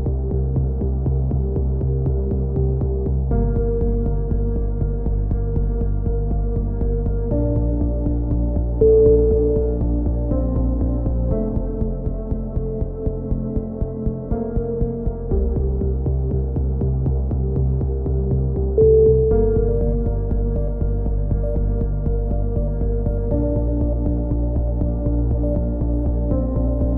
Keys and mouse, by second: 5.7 Tab, 6.0-7.1 drag, 7.0 KP_6, 7.6 KP_7, 8.0 z, 8.3 z, 9.4 click, 10.3 z, 10.3 c, 12.0 middle click, 12.3-14.7 drag, 13.3 z, 14.9 s, 16.1 KP_7, 16.4 z, 19.9-21.1 middle drag, 21.3 KP_3, 22.4-23.4 middle drag, 22.9-25.3 typing, 25.5 click, 25.7-26.7 drag.